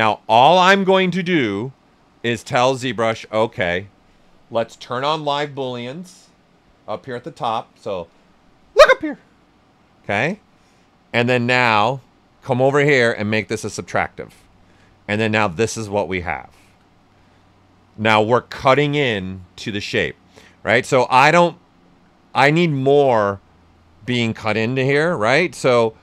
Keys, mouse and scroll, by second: 7.6 typing, 11.1-13.1 drag, 13.9-20.3 right drag, 24.8 click, 25.2 right click.